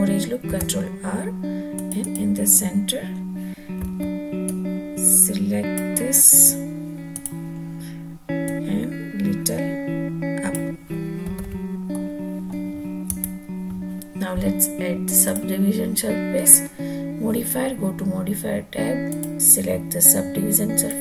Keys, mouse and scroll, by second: 0.3 ctrl+r, 1.8 click, 3.6 1, 4.2-5.7 drag, 7.0 click, 8.2-10.4 drag, 11.2 alt+z, 11.7-12.3 middle drag, 12.9 Tab, 15.0 click, 18.9-20.7 drag.